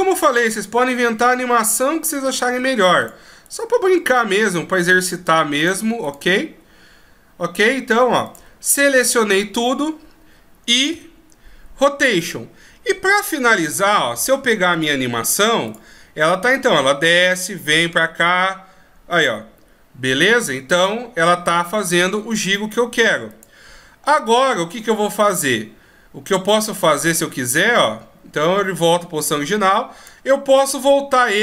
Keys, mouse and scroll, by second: 2.6 right click, 2.8 r, 3.7 right click, 5.2 right click, 5.5 r, 6.3 right click, 6.6 r, 9.1 a, 9.5 a, 11.2 i, 13.2 middle click, 15.0 click, 23.6 click, 25.6 click.